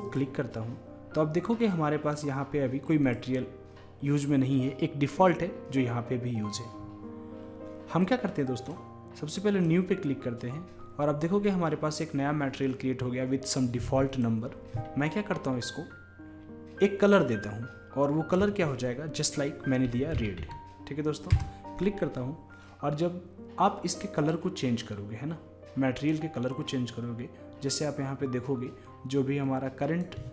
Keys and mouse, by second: 0.1-11.3 drag, 11.3-14.1 middle drag, 14.1-30.3 drag.